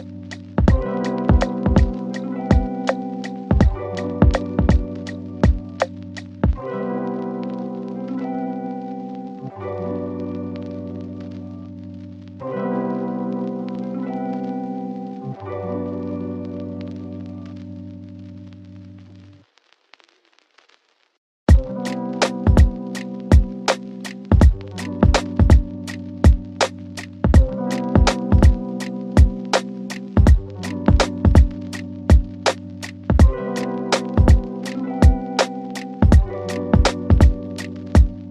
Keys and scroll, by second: 12.1 shift+Page_Up, 13.5 c, 15.7 shift+F2, 16.1 F3, 26.5 F3, 27.0 Escape, 27.7 shift+F2, 28.0 Escape.